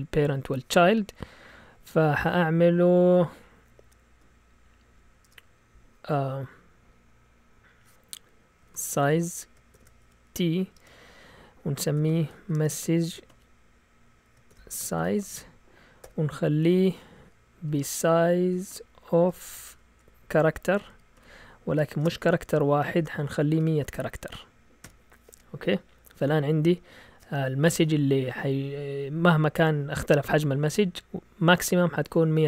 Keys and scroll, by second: 3.3 Up, 3.6 Up, 5.2 Return, 8.4-16.0 typing, 17.4-24.8 typing.